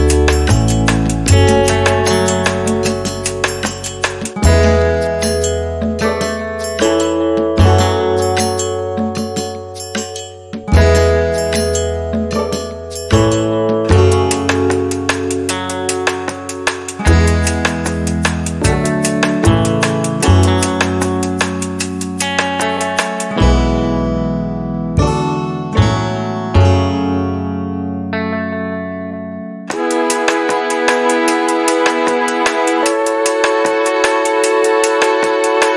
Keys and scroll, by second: 3.4 m, 6.0 2, 6.7 ., 7.6 Return, 9.3 p, 12.8 Return, 24.9 t, 26.7 5, 27.2 Return, 31.4 m.